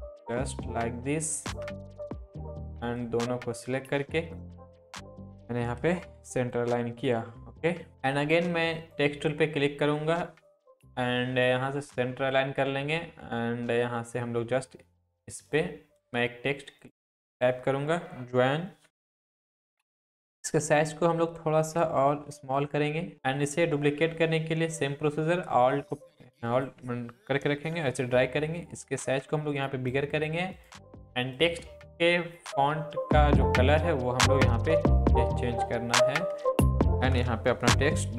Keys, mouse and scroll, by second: 1.7 shift+click, 2.4 shift+click, 3.0-4.5 drag, 4.6 Down, 6.4 click, 7.2 scroll up 1, 8.7 click, 15.3 click, 18.6-19.4 typing, 19.4-19.7 click, 19.8 Up, 20.7 ctrl+t, 21.8-22.7 alt+drag, 23.4-26.8 alt+drag, 27.9 ctrl+t, 28.6-29.8 drag, 31.5 click, 35.9 click, 36.8-38.1 typing.